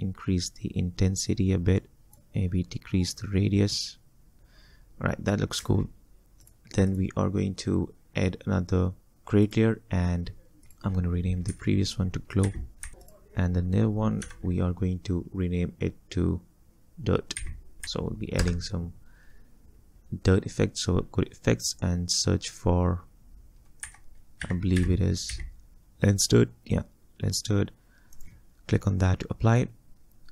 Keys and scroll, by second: 5.6 space, 11.5 F2, 12.2-13.4 typing, 14.2 F2, 17.4-18.4 typing, 23.9-25.3 typing.